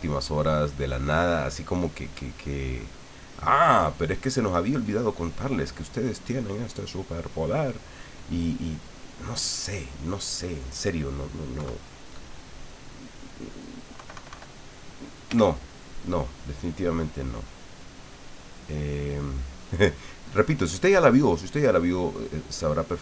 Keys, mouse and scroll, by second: 0.2 click, 1.0 click, 1.6 click, 2.3 click, 3.3-4.9 drag, 5.1 middle click, 5.7-6.8 drag, 6.9 click, 9.9 click, 11.5 KP_3, 13.9 KP_Subtract, 15.3 f, 16.2 click, 17.0-18.9 drag, 19.2 click, 21.3 middle click, 22.3-23.0 scroll up 1.